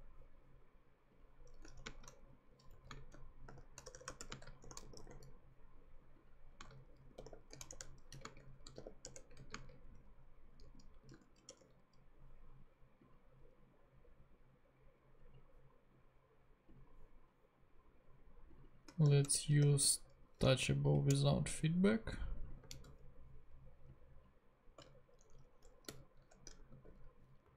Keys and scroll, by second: 1.8 shift+[, 1.8 shift+space, 2.7 shift+Right, 2.9-5.6 typing, 6.7-11.1 typing, 7.7 shift+Return, 11.5 Return, 18.8-20.1 typing, 21.2 Return, 22.7 super+c, 25.2 shift+super+Left, 25.9 shift+super+,, 26.6 shift+super+,, 26.7 shift+super+v, 27.4 super+Right.